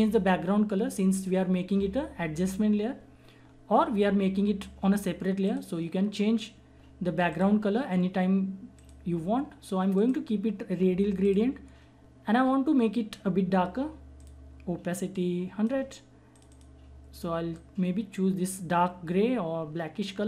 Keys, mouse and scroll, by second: 5.4 click, 14.1-20.2 drag.